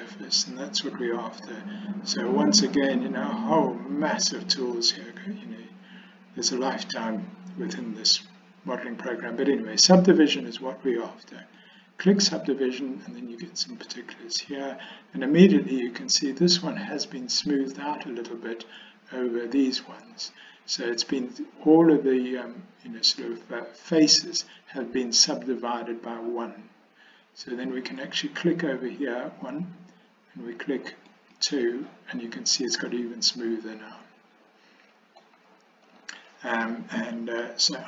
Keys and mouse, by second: 31.2 click, 32.8-34.8 middle drag, 34.8 click, 35.0 middle click, 35.3 click, 37.5-37.8 middle drag.